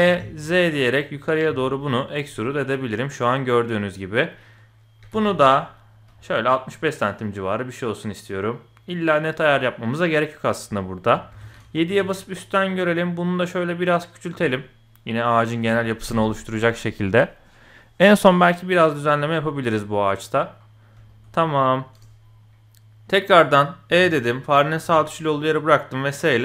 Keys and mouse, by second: 0.0 e, 2.3-4.2 drag, 5.0 g, 9.5-10.5 drag, 11.3 KP_7, 11.9 s, 14.4 middle click, 15.6 KP_1, 19.9 middle click, 21.1 shift+middle click, 21.3-22.0 middle drag, 23.3 middle click, 23.9 e, 24.8 s.